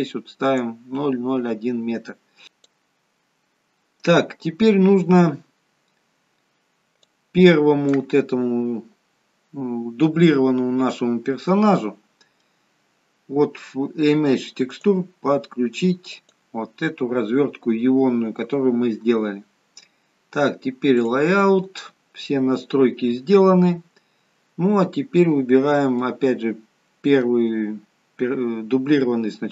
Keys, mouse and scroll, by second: 21.2 click.